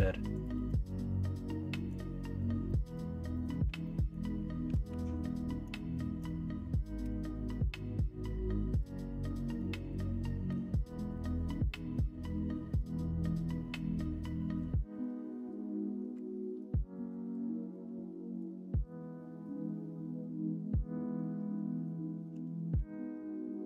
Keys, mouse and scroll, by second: 0.5 ctrl+z, 2.6 middle click, 3.3 middle click, 3.8 middle click, 4.8 1, 7.0 m, 10.4 m, 12.4 middle click, 13.5 middle click, 16.4-21.8 middle drag, 22.3 KP_1, 22.7 KP_3.